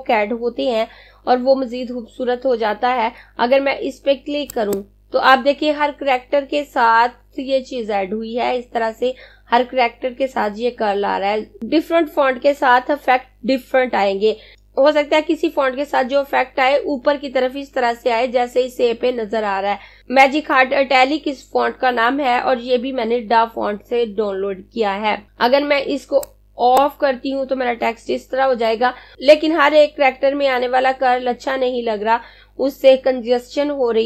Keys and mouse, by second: 4.2 click, 26.3 click.